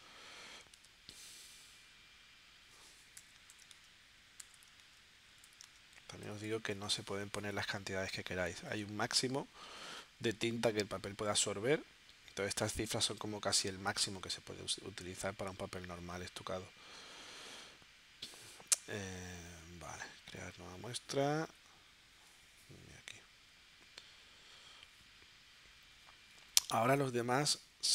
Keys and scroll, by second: 0.9 super+Tab, 3.2 6, 3.5 0, 3.7 Tab, 4.4 4, 4.8 Tab, 26.9 super+Tab.